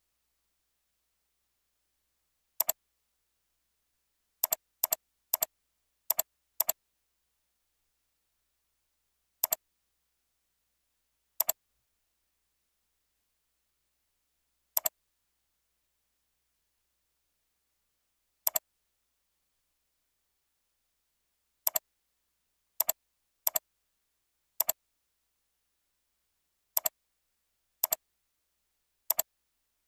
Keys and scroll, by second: 0.6 ctrl+z, 6.9 ctrl+z.